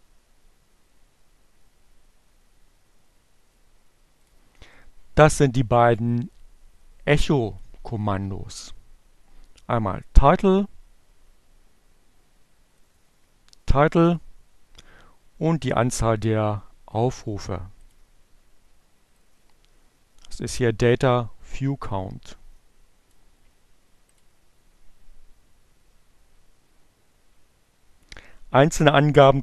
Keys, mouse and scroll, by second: 5.0-6.1 drag, 7.2-9.7 drag, 13.2-15.0 drag, 15.8-17.0 drag, 18.0 click, 19.6-22.4 drag, 22.5-23.7 drag, 23.7-29.4 middle drag.